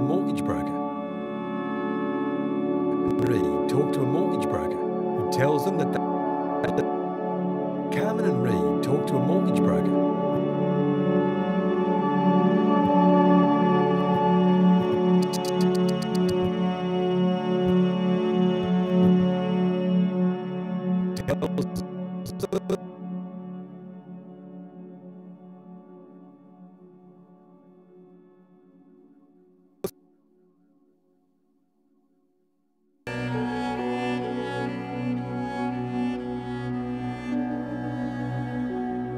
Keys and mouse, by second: 0.8 space, 2.1 g, 2.5 click, 2.8 click, 3.1 space, 5.7-7.1 typing, 6.6 click, 10.1 space, 11.3-14.1 drag, 14.8 click, 17.5 click, 18.6 Right, 18.7 Right, 18.9 Right, 19.0 Right, 20.0 i, 20.0 click, 21.0 click, 22.2 click, 23.2-24.7 typing, 25.0 click, 26.2 click, 27.8 click, 29.7 click, 29.8-30.6 typing, 31.0 click, 32.2 typing, 32.3 click, 34.4 click, 35.9 click, 36.4-37.1 typing, 37.3 click, 38.3-38.7 typing.